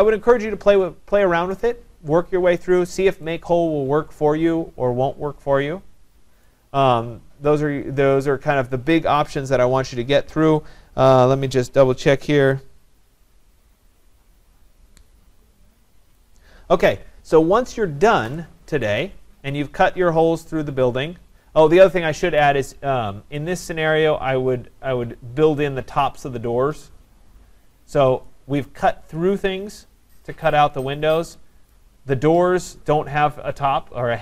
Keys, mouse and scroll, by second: 0.9-1.3 scroll, 2.6 right click, 6.0 scroll, 6.5 right click, 17.8-18.2 scroll down 3, 18.9 right click, 19.1 scroll up 2, 19.2 scroll, 22.4 right click, 22.8 scroll, 28.7 right click, 31.7 right click.